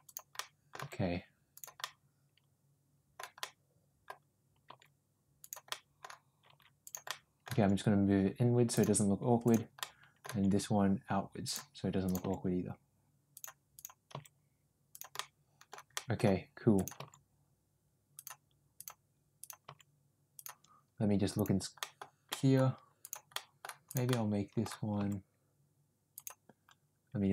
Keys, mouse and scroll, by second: 0.3 middle click, 0.7 g, 1.8-3.1 middle drag, 3.3 middle click, 4.6 g, 5.6 middle click, 6.4 g, 7.0 middle click, 7.4 g, 9.4 click, 9.7 middle click, 10.2 g, 11.9 click, 12.1 g, 14.0 g, 15.2 middle click, 15.9 middle click, 16.7 click, 16.9 g, 19.3 click, 19.5 g, 21.8 middle click, 22.2 middle click, 23.2 middle click, 24.0 middle click, 24.9 g.